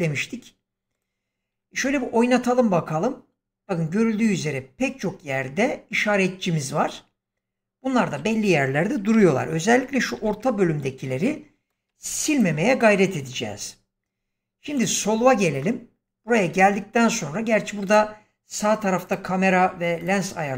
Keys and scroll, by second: 1.7 space, 8.1 space, 9.0 shift+Left, 10.1 shift+,.